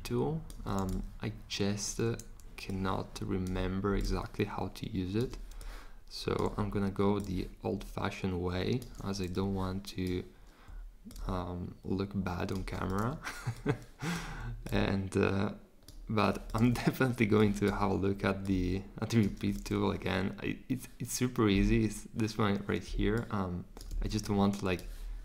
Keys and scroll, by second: 23.9 super+z.